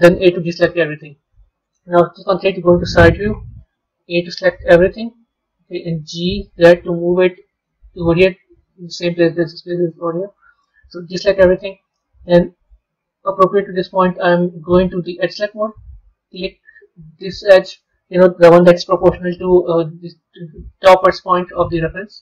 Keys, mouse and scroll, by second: 1.0-2.0 middle drag, 2.0 KP_3, 11.9-14.9 middle drag, 15.1 click, 17.1 click, 18.4 KP_3, 21.6 middle click.